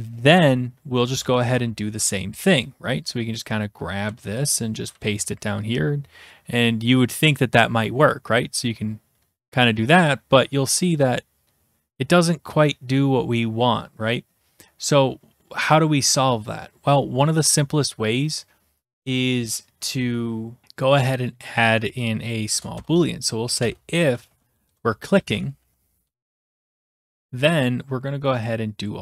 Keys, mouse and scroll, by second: 1.1-2.1 typing, 3.3 click, 4.1 ctrl+c, 4.5 click, 4.8 Return, 4.9 ctrl+v, 7.3-8.4 drag, 15.7 click, 21.7 click, 22.5 Return, 22.7-27.6 typing, 28.9 click.